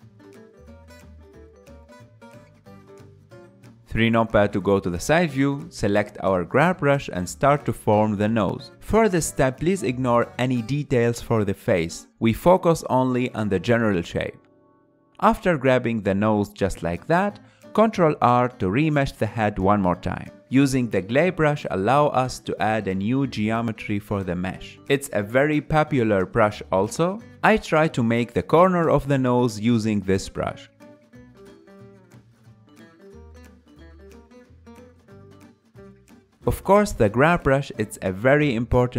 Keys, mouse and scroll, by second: 1.9-3.8 middle drag, 3.8 KP_3, 4.7-6.4 ctrl+middle drag, 6.4 click, 6.9 f, 7.9-13.0 drag, 13.0-14.7 middle drag, 14.7 click, 15.3 shift+middle click, 16.3 ctrl+r, 18.0 Tab, 18.6 Tab, 19.0-22.0 middle drag, 22.6-24.5 drag, 24.5 ctrl+middle click, 25.4 f, 26.5-29.5 drag, 29.8-31.3 middle drag, 31.3-32.5 drag, 32.5 middle click, 33.2-34.9 drag, 34.9-37.1 middle drag, 37.1 KP_1, 38.7 click.